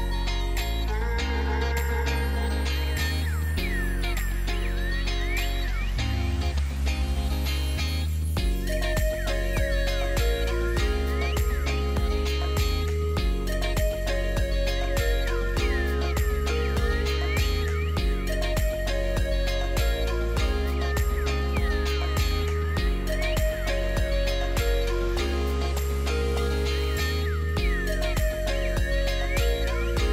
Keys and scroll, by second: 14.4 super+z, 15.0 alt+super+z, 16.3 alt+super+z.